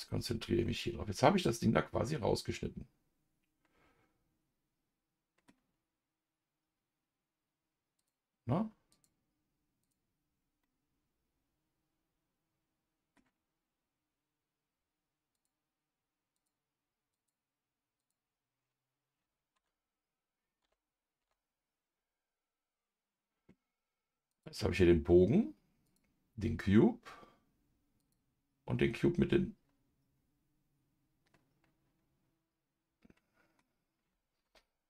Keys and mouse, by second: 0.6-5.4 middle drag, 8.9 click, 9.8 click, 10.6-13.1 middle drag, 15.3 click, 16.3 click, 17.1 click, 18.0 click, 19.5 KP_Divide, 20.6 KP_Divide, 21.2 KP_Divide, 24.3 click, 25.8 click, 28.0 click, 29.0-33.6 middle drag, 34.4 KP_Divide.